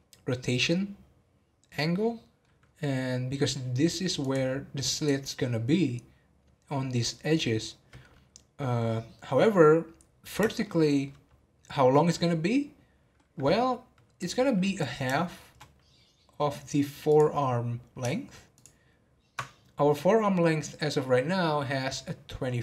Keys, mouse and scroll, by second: 1.7 middle click, 2.6-3.8 scroll up 3, 4.2 click, 9.9-10.6 scroll down 4, 10.6-13.6 shift+middle drag, 14.1 click, 15.1-17.0 shift+middle drag, 17.0 click, 18.5 ctrl+click.